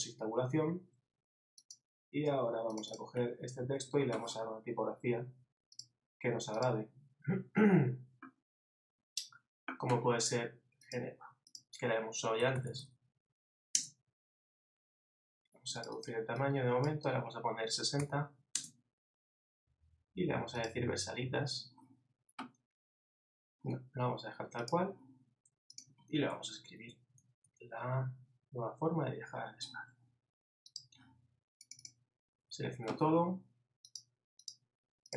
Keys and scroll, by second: 26.6 shift+Left, 27.9 shift+Right.